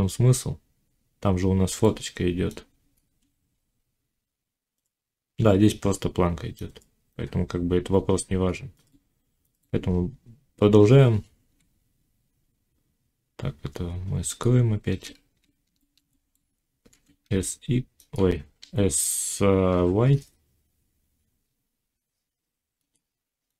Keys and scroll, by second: 10.8 z, 15.0 z, 16.9 s.